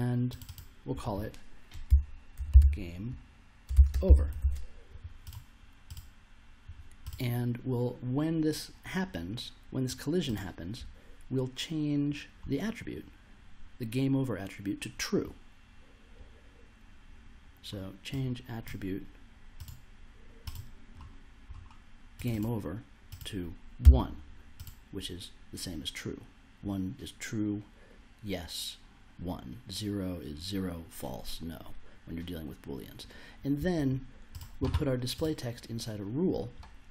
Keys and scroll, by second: 1.6-4.9 typing, 23.8 1.